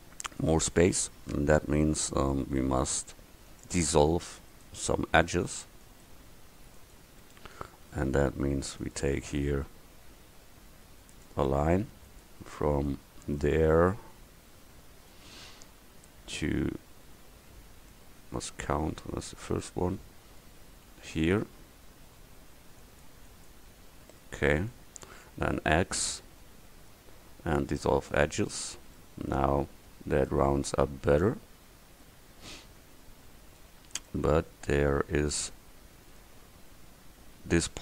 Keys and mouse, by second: 21.2-24.5 drag, 25.6 x, 29.5 Tab, 33.7 Tab.